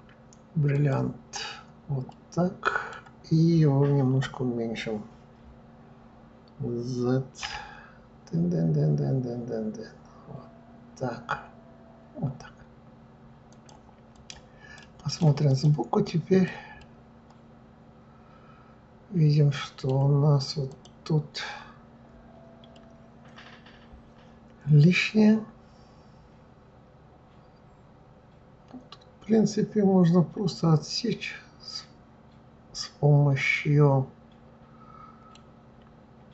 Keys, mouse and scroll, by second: 2.1-5.1 middle drag, 7.4 s, 14.1 click, 14.7-15.6 right drag, 16.0 drag, 16.8-19.8 middle drag, 20.7 click, 22.7-25.7 middle drag.